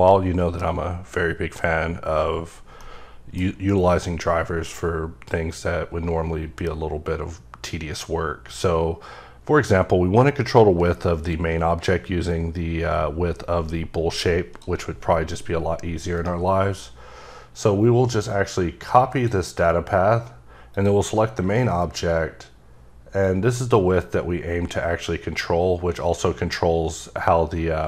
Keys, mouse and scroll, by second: 4.7 click, 16.1 right click, 18.9 right click, 19.6 click, 20.7 click, 23.2 click.